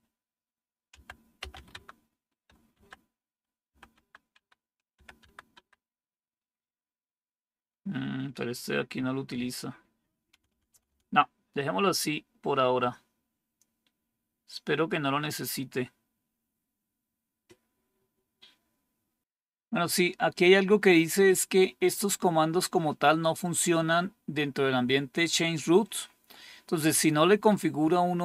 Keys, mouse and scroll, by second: 0.0-5.9 typing, 10.2 BackSpace, 10.4 BackSpace, 10.6 BackSpace, 10.7 BackSpace.